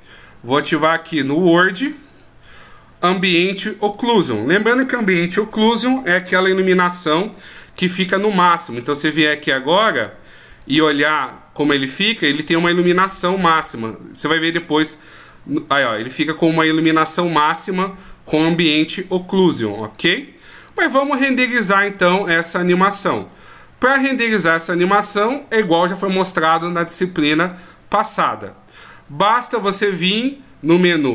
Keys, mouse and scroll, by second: 2.1 click, 9.2 click, 12.1 middle click, 13.8 click, 20.0 click, 21.3 middle click, 22.4-22.8 scroll up 1, 23.4 scroll up 2, 24.8 middle click, 29.4 right click.